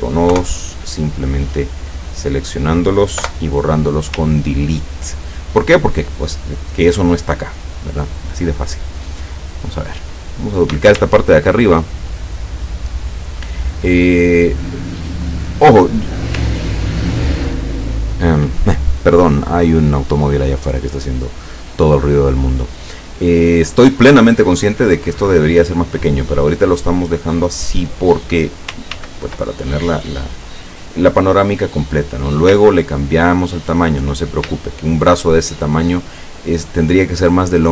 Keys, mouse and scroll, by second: 0.4 Delete, 1.1-1.6 scroll down 2, 2.0 click, 3.2 Delete, 4.3-4.7 ctrl+scroll down 2, 9.5 click, 10.1 click, 11.2 ctrl+shift+scroll down 2, 12.0-12.5 ctrl+scroll down 4, 13.0 ctrl+scroll down 2, 14.2-15.4 ctrl+drag, 16.6-17.4 ctrl+middle drag, 27.1 click, 29.0 ctrl+d, 29.6-32.5 ctrl+drag, 32.9-33.4 ctrl+scroll down 2, 33.6 ctrl+scroll down 2, 34.7-35.3 ctrl+scroll up 4.